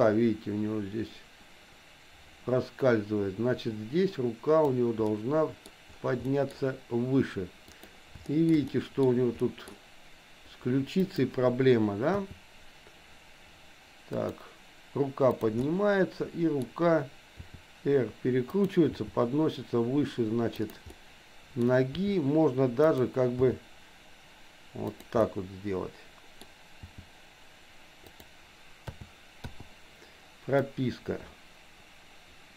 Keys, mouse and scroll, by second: 5.1 middle click, 6.3 middle click, 7.7 click, 8.3 shift+middle click, 8.7 middle click, 9.4 middle click, 11.1 click, 12.2 r, 15.3 click, 15.7-16.7 middle drag, 17.4 r, 19.1 g, 20.9 scroll up 1, 21.1 middle click, 21.6 scroll down 1, 21.9 r, 23.4 g, 25.2-26.4 middle drag, 26.9 g, 28.9 a, 29.6 i, 30.7-32.5 drag.